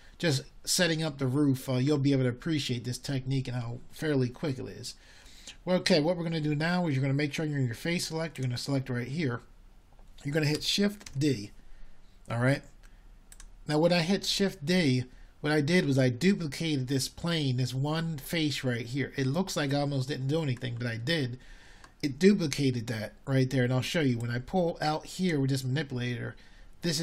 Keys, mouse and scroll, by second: 0.1-1.3 middle drag, 3.4 a, 9.7 middle click, 18.9 shift+d.